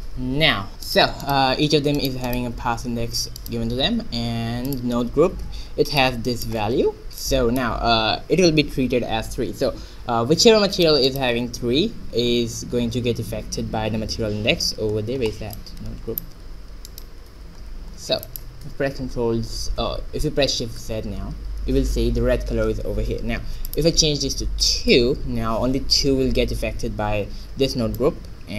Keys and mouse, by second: 0.3 click, 1.5-5.3 middle drag, 5.3 right click, 5.8 Tab, 9.1 middle click, 11.4-13.9 right drag, 15.6-17.5 middle drag, 17.5 click, 17.5-18.9 right drag, 17.8 Tab, 18.9 middle click, 21.7 shift+z, 24.4-26.1 drag.